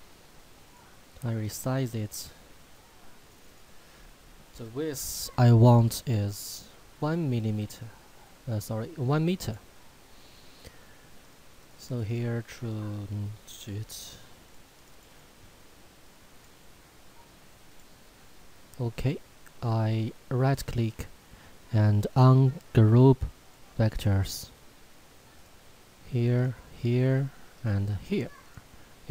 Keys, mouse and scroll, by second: 9.4 click, 20.7 right click, 23.4 click.